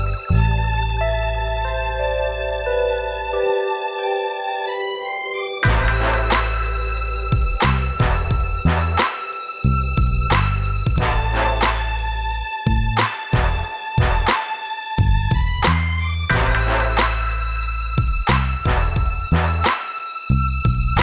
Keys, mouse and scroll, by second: 0.2 scroll down 1, 1.3 scroll up 1, 3.1 click, 6.9 middle click, 7.8 scroll up 2, 8.1 right click, 8.3 right click, 9.5 click, 10.1 right click, 10.8 click, 11.9 click, 12.5 middle click, 14.9 click, 17.5 scroll down 2, 18.9 scroll up 2.